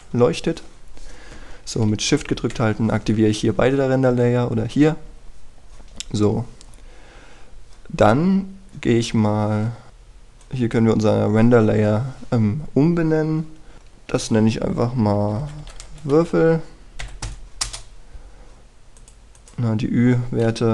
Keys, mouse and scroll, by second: 3.0 shift+click, 9.9 click, 16.1 typing, 18.6 Return, 19.9 click.